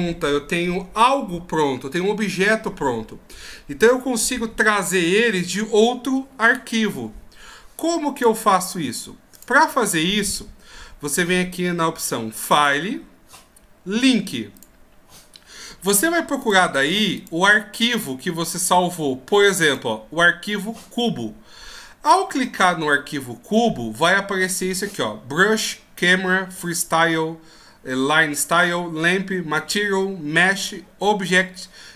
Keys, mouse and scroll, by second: 8.1 ctrl+q, 12.5 ctrl+q.